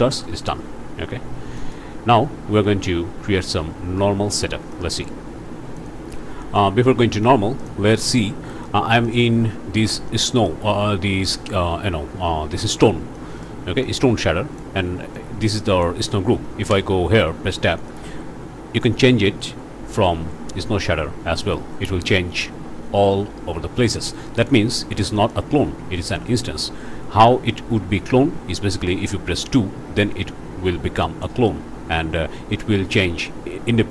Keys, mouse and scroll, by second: 1.1 Escape, 1.6 click, 2.2 scroll up 3, 2.5 alt+a, 4.1-4.4 scroll down 2, 4.7 shift+click, 5.8 click, 6.6 click, 7.1 scroll up 1, 7.6 click, 9.1 click, 10.1 click, 13.1 click, 13.8 click, 15.1 click, 16.7 Tab, 17.3 scroll down 1, 17.7 click, 18.0-18.6 scroll up 1, 20.0-24.6 drag, 24.8 scroll down 1, 25.2 click, 26.0 Tab, 26.5-26.8 scroll up 1, 30.0-31.4 drag.